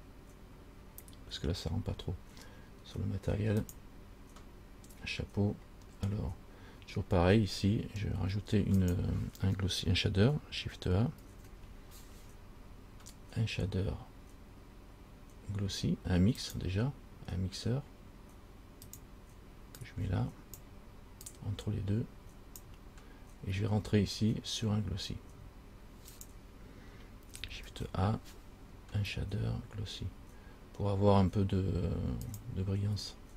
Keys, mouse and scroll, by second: 3.9 click, 6.1 scroll down 3, 7.6 scroll down 2, 8.4-9.0 scroll down 1, 9.0 click, 11.4 shift+a, 20.1 click, 21.5 click, 21.8 click, 26.3 click, 27.9 shift+a.